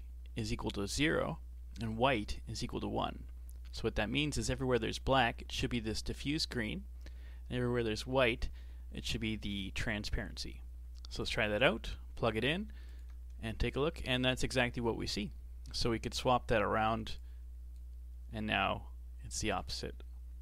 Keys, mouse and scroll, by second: 11.2 click, 12.9 ctrl+shift+click, 13.6-14.8 middle drag, 14.8 scroll up 3, 15.4-17.2 middle drag, 17.2 click, 18.3 scroll down 2, 18.5-19.9 middle drag, 19.9 a, 20.3 a.